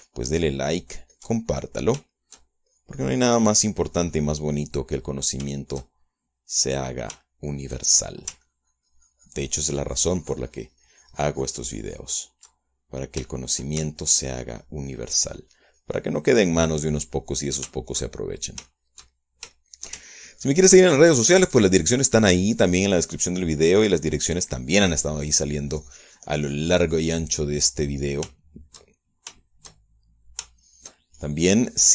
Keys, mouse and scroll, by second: 1.7-2.9 ctrl+drag, 3.1 ctrl+middle click, 3.7 shift+middle click, 4.3 shift+click, 5.4 click, 6.3 middle click, 7.1 shift+middle click, 8.1 shift+middle click, 8.8 shift+middle click, 10.0-14.1 ctrl+drag, 14.1 ctrl+middle click, 14.8 ctrl+shift+middle click, 15.5-19.1 ctrl+shift+drag, 19.3 ctrl+shift+middle click, 20.3 ctrl+shift+middle click, 21.6-28.9 ctrl+shift+drag, 29.1 middle click, 29.7 shift+middle click, 30.0 shift+middle click, 30.5 shift+middle click, 30.9 shift+right click, 31.6 shift+middle click.